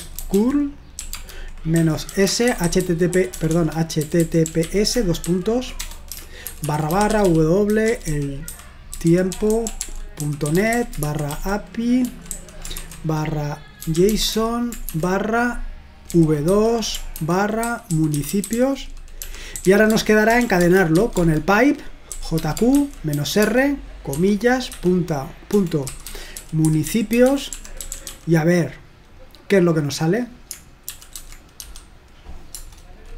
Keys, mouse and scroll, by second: 0.0-14.9 typing, 16.1-23.6 typing, 24.7-28.5 typing, 30.9-31.5 typing, 32.5 Return.